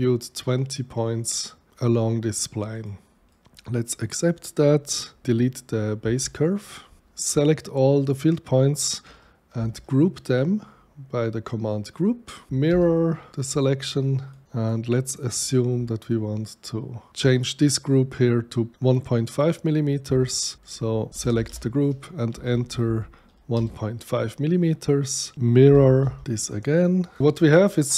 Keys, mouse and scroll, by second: 2.7 click, 3.3 click, 4.4 click, 6.1 Delete, 9.5 ctrl+g, 12.5 r, 12.7 Return, 13.5 click, 14.3 click, 14.4 click, 16.0-17.1 alt+drag, 20.5 click, 21.1-22.8 typing, 23.5 Return, 25.8 m, 25.8 i, 26.0 r, 26.2 Return, 26.2 click, 27.0 click.